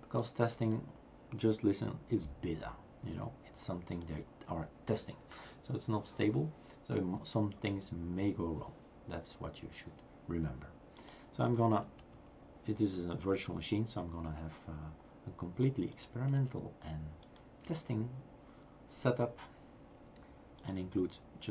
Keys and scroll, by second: 16.4 BackSpace, 17.6 BackSpace.